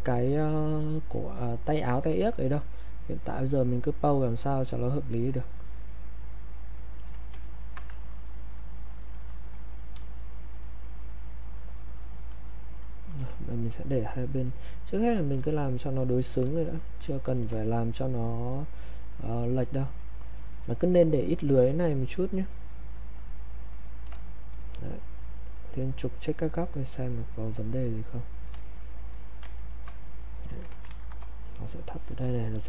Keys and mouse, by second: 2.8 click, 7.0 alt+click, 7.4 ctrl+right click, 7.8 click, 8.8 click, 10.0 space, 10.4 click, 10.5 space, 11.0 click, 13.7 click, 15.4 alt+shift+click, 16.8 click, 17.1 alt+click, 18.2 click, 21.2 click, 24.5-28.1 drag, 29.1 alt+click, 29.6 ctrl+right click, 30.5 click, 30.9 ctrl+shift+1, 31.2-32.6 drag.